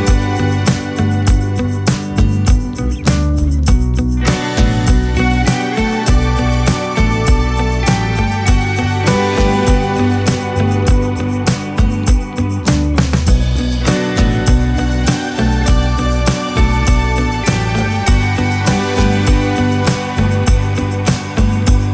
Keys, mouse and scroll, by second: 2.1-3.7 drag, 3.0 ctrl+s, 6.7 click, 8.2 click, 8.5-9.4 middle drag, 9.4-18.0 drag, 18.8 n, 20.2 click, 20.7 KP_0, 21.6 ctrl+s.